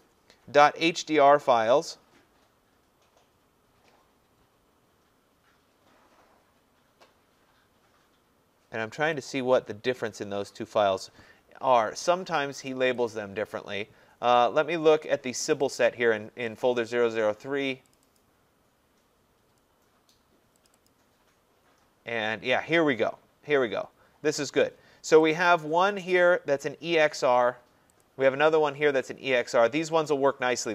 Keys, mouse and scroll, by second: 9.2 click, 13.1 click, 15.5 click, 15.7 click, 18.0 click, 18.2 click, 20.7 click, 20.9 click, 25.3 click, 28.0 click.